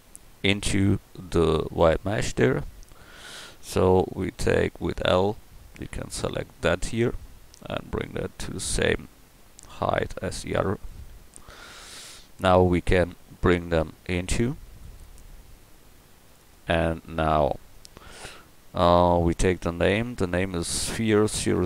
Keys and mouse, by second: 3.2 Tab, 3.9 a, 5.4 l, 6.9 KP_7, 11.6 Tab, 16.9-17.7 middle drag.